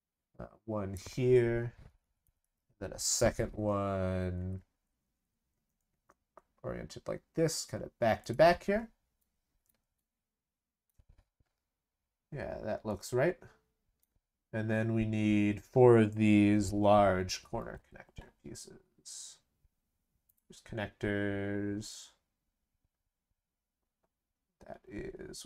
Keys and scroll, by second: 2.2 ctrl+c, 2.4 ctrl+v.